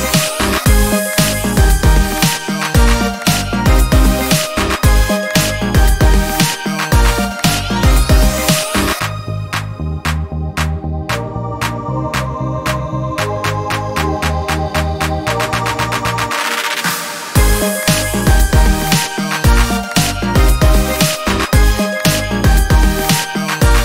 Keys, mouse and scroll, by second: 0.2 ctrl+space, 1.5 ctrl+click, 2.2-5.5 ctrl+shift+drag, 6.5 ctrl+shift+click, 7.2-9.4 ctrl+shift+drag, 9.8 ctrl+d, 10.2-12.5 ctrl+drag, 13.3 ctrl+shift+click, 14.4-16.6 ctrl+shift+drag, 19.3 click, 20.2 ctrl+d, 20.5 ctrl+click, 22.5 click.